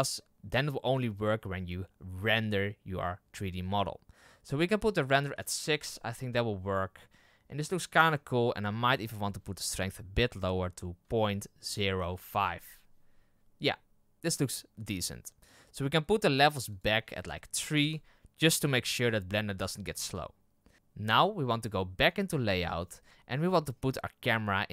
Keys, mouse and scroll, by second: 6.4-8.0 middle drag, 8.0-9.5 scroll down 1, 17.8-20.7 drag, 22.1 click, 22.6-23.1 scroll down 10.